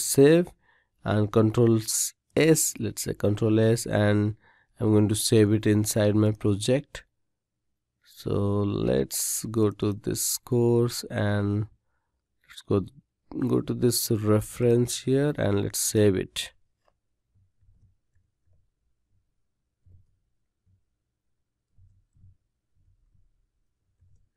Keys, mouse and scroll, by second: 0.0 ctrl+s.